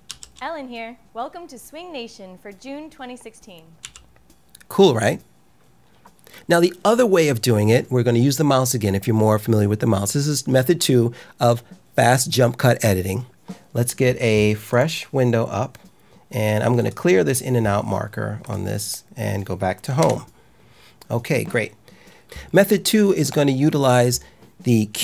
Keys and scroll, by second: 0.0 l, 3.7 k, 19.9 Home.